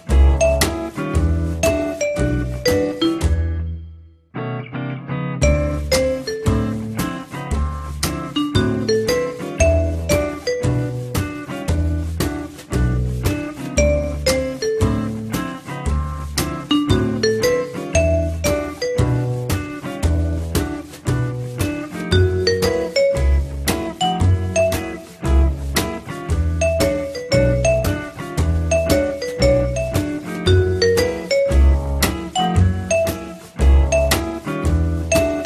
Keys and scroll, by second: 9.9-10.8 typing, 12.3 ctrl+s, 24.9 m.